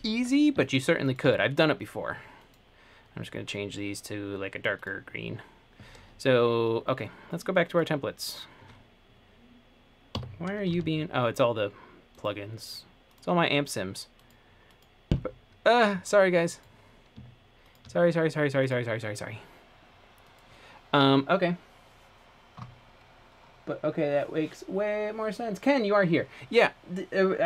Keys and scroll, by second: 10.3 Escape, 10.9 super+,.